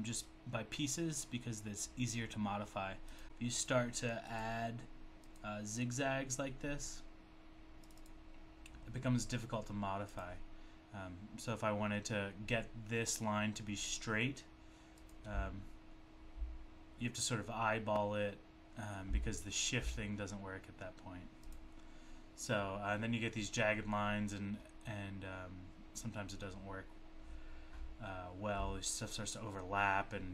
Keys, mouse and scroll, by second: 3.2 click, 3.3 click, 3.6 click, 5.3 click, 7.8 click, 7.8 click, 8.0 double click, 10.2 double click, 15.0 click, 15.0 click, 21.5 click, 21.5 click.